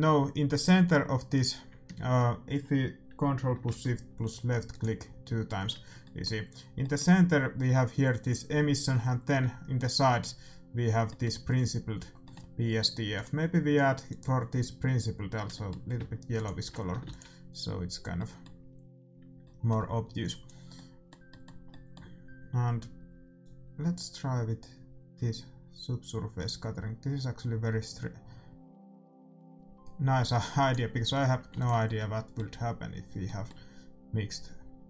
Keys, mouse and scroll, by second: 4.2-7.2 drag, 6.0-8.7 middle drag, 8.1-9.9 drag, 12.5-14.0 middle drag, 13.1-15.0 drag, 15.5-17.4 middle drag, 16.3-18.1 drag, 17.0 ctrl+s, 18.1-20.2 middle drag, 20.4-22.1 drag, 23.4-28.5 drag, 31.5 ctrl+s.